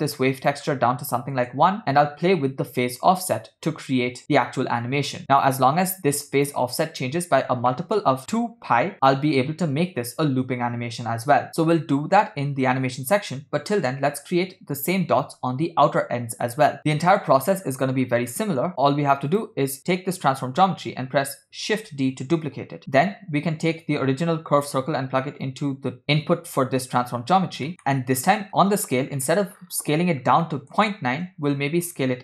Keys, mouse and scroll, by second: 0.4-1.4 drag, 2.3-5.2 shift+drag, 5.3-6.5 shift+drag, 7.8 middle click, 8.1 scroll down 1, 12.0 scroll up 1, 12.2 scroll down 1, 13.8 scroll down 3, 14.6 scroll down 2, 16.8 middle click, 18.3 middle click, 19.3 click, 21.7 shift+d, 22.9 middle click, 24.8-27.2 drag, 27.9 middle click, 28.5 scroll down 1, 29.3 middle click, 29.7-30.4 scroll up 6, 30.5 middle click, 31.5-32.2 shift+drag.